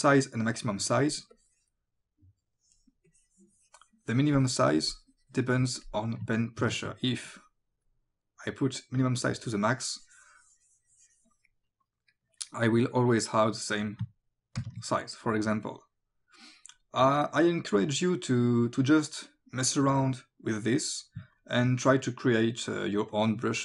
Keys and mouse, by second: 1.4 click, 3.1 click, 6.6 ctrl+z, 7.3 click, 9.9 click, 14.6 ctrl+z, 19.1 click, 21.4 click, 23.1 click.